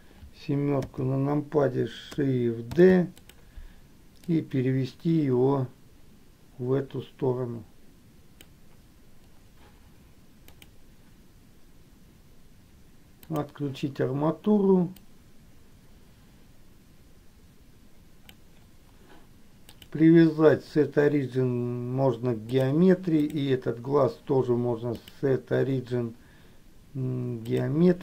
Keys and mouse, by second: 1.0 KP_7, 3.1 shift+d, 4.6-8.8 drag, 15.4-18.7 drag, 20.0-22.9 drag, 25.0-27.9 drag.